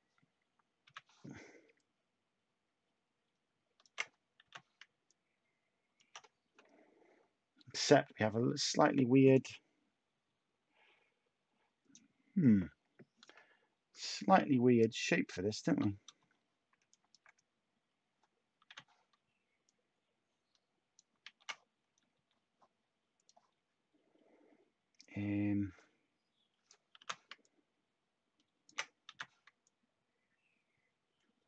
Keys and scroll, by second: 0.8 b, 4.4 h, 18.6 h, 22.1 h, 27.0 t, 29.0 h.